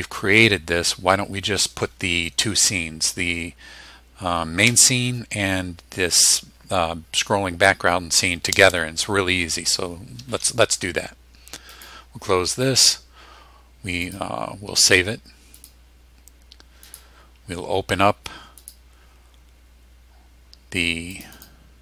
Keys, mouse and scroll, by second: 11.8 click, 14.1 click, 15.6 click, 16.9 click, 18.6 click, 21.1 click.